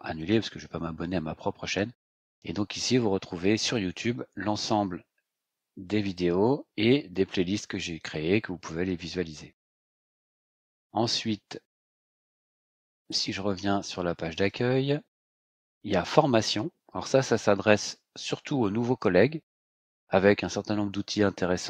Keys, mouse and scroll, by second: 0.2 click, 2.8 scroll down 2, 3.6 scroll down 2, 4.4 scroll down 2, 7.1 scroll down 2, 9.8-10.5 scroll up 4, 11.7 click, 14.3 click, 16.0 click.